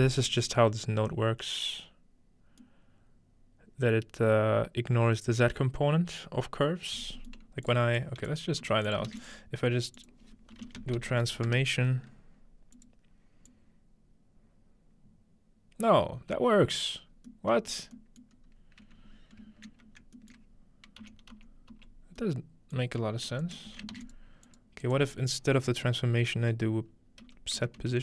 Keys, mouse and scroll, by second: 7.7 click, 8.6-9.1 typing, 10.0-11.6 shift+drag, 10.6-11.6 typing, 12.7 click, 13.5-16.8 drag, 17.0-17.3 scroll down 1, 17.3-18.2 middle drag, 18.4 scroll up 1, 18.6-20.0 shift+middle drag, 20.4-21.1 shift+middle drag, 21.0 m, 23.4-24.1 ctrl+drag, 23.7 typing, 23.9 ctrl+shift+a, 24.2 ctrl+drag, 24.6 ctrl+click, 25.0-26.8 ctrl+drag, 27.2-28.0 typing.